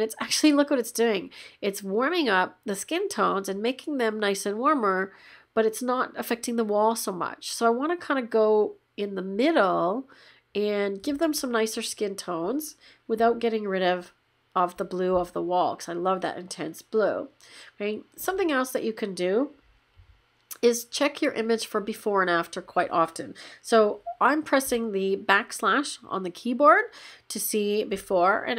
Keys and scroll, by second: 24.6 \.